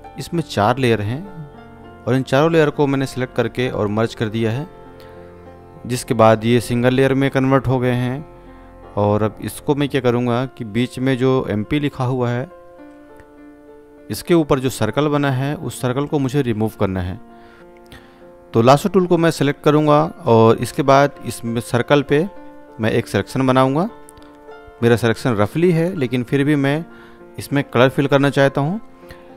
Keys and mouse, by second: 1.7 ctrl+e, 4.5 click, 18.8-24.6 drag, 27.2 ctrl+alt+z.